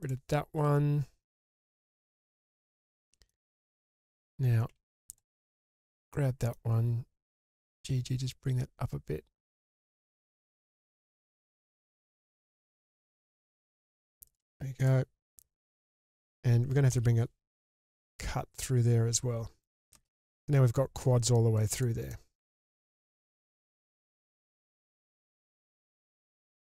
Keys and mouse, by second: 2.1 ctrl+x, 3.0 middle click, 4.7 1, 5.1-5.8 drag, 6.1 middle click, 7.2 g, 7.5 g, 10.1 click, 11.1-12.2 middle drag, 12.6 click, 12.9 k, 14.8-15.2 drag, 15.2-16.2 middle drag, 16.9 k, 21.7 click, 22.1 middle click, 23.0 click, 24.3 g, 24.4 g, 26.4 click.